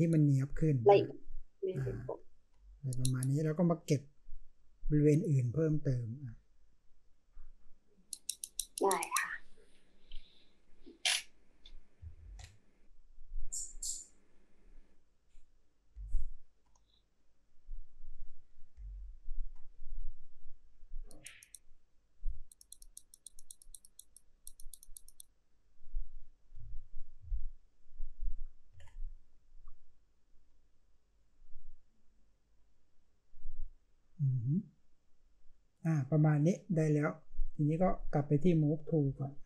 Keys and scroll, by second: 12.2 ctrl+z, 15.9-16.6 space, 18.7-19.5 space, 26.5-27.1 space, 27.2 space.